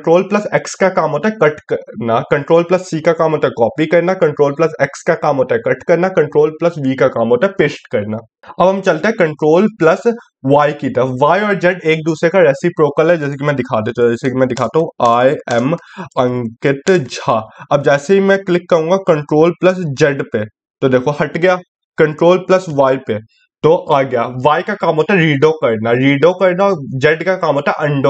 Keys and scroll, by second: 9.9 ctrl+y, 19.2 ctrl+z.